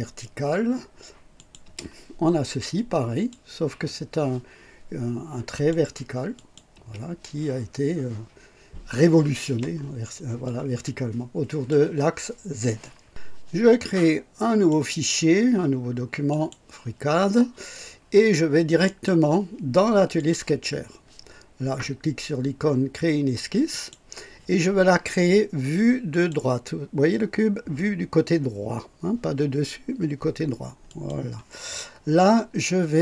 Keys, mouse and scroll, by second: 1.3 click, 1.6 space, 2.7 click, 5.5 click, 6.4 click, 6.7 space, 10.4-11.9 drag, 14.6 click, 16.3 click, 18.8 click, 20.1 click, 23.7 click, 26.1 click, 30.8 click.